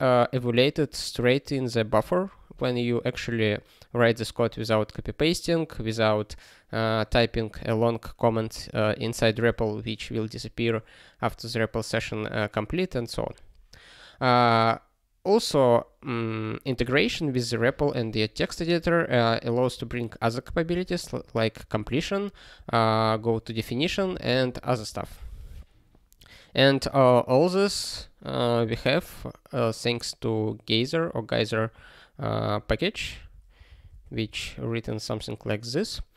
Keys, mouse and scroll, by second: 19.9 alt+f, 20.1 alt+f, 20.7 alt+b, 21.5 ctrl+space, 21.9 alt+f, 22.5 ctrl+g, 23.1 alt+f, 23.8 ctrl+space, 24.2 alt+b, 33.2 alt+x.